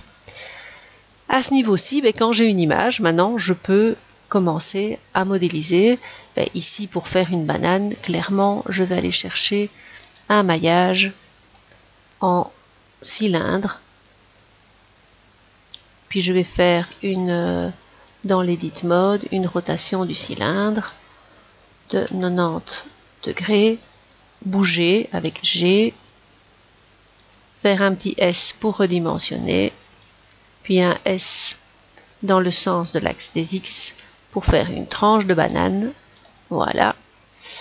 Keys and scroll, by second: 19.8 r, 22.3 typing, 25.2 g, 28.1 s, 31.2 s, 33.3 x.